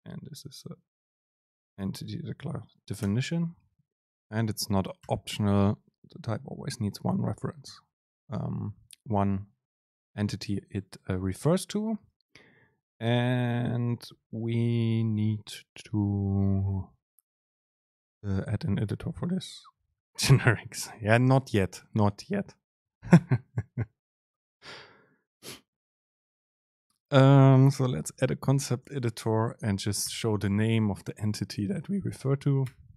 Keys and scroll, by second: 4.1 super+space, 29.0 super+space.